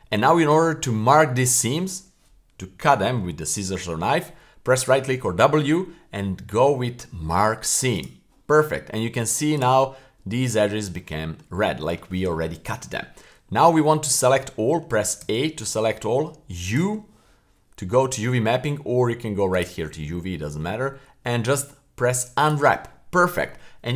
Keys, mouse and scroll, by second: 0.0 u, 5.0 w.